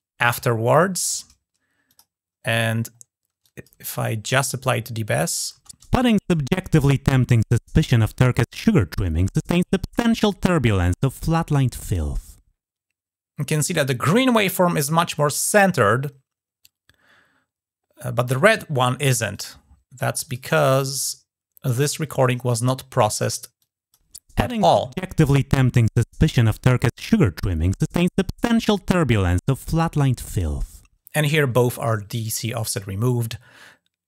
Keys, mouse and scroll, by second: 1.7 click, 3.3 click, 5.1 click, 16.5-19.1 scroll down 2, 19.1 click, 20.1 click, 21.5 click, 22.1 scroll up 2, 22.6-23.4 scroll down 3, 23.4 click, 25.0 click.